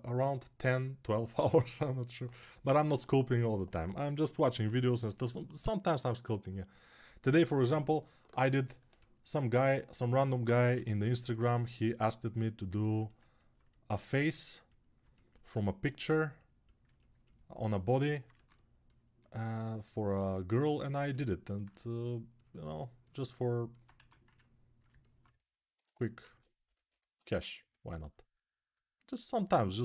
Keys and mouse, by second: 10.5 g, 12.4-16.6 alt+right drag, 18.1 2, 20.5-29.8 alt+right drag, 23.7 1, 26.4 g.